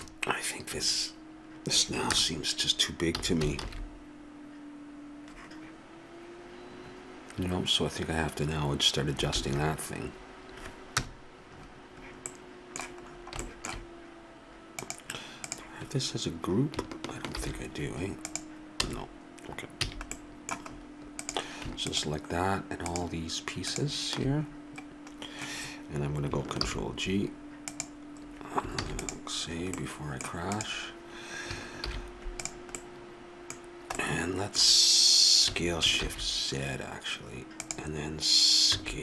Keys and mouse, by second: 3.2 a, 3.9 shift+z, 9.7 shift+z, 11.0 KP_0, 14.8-17.3 drag, 17.3 shift+g, 18.8 a, 19.9 a, 21.2-23.3 drag, 26.7 ctrl+g, 28.8 ctrl+s, 31.8 shift+g, 35.5 s, 38.7 a.